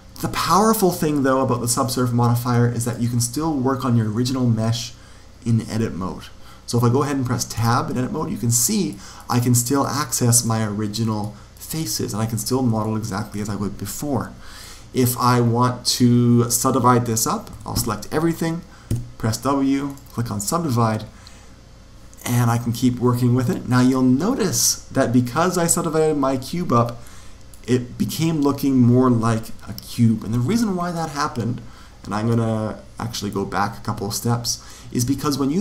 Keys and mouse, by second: 0.0 Escape, 2.7 click, 7.5 Tab, 8.6-13.1 middle drag, 9.1-10.4 drag, 10.8-13.3 drag, 13.3 right click, 14.2-17.4 middle drag, 17.4 a, 17.7 a, 18.8 w, 23.3 click, 26.9-28.7 middle drag, 33.2 ctrl+z, 34.9 a.